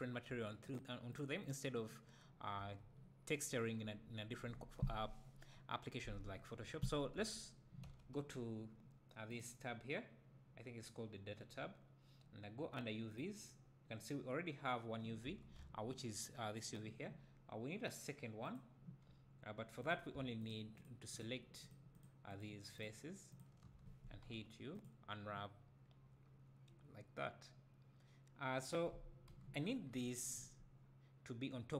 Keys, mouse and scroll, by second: 0.7 click, 2.6 Tab, 6.6 `, 7.1 Tab, 15.2 Tab, 15.6 a, 18.5-19.8 drag, 20.4 shift+click, 21.2 shift+click, 22.8 shift+click, 23.3 shift+click, 24.8 u.